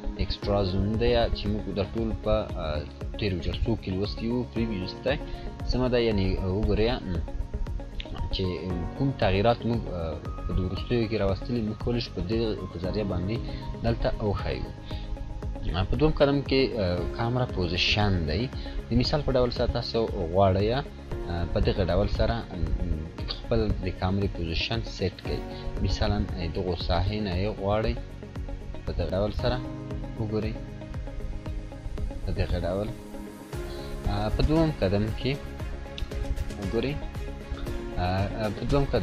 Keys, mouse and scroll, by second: 13.4 click, 16.4 click, 21.0-23.6 drag, 28.1 click, 28.1-29.3 drag, 31.8-32.4 drag, 36.8-37.1 scroll down 1.